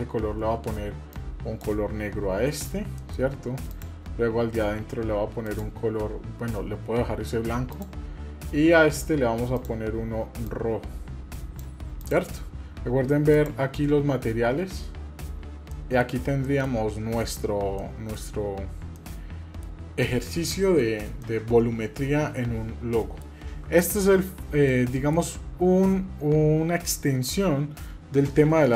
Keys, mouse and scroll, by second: 3.0 middle click, 3.7 click, 5.4 click, 7.7 click, 9.6 click, 12.0 click, 13.4 click, 15.7 middle click, 16.1 scroll down 2, 16.5-16.8 middle drag, 16.8 scroll up 1, 17.2-17.6 shift+middle drag, 17.8 middle click, 18.3-18.9 scroll up 1, 19.0-19.8 shift+middle drag, 20.5 middle click, 20.9-21.2 scroll down 2, 21.2-23.3 middle drag, 24.2 scroll up 1, 24.7-27.1 middle drag, 28.5 shift+a.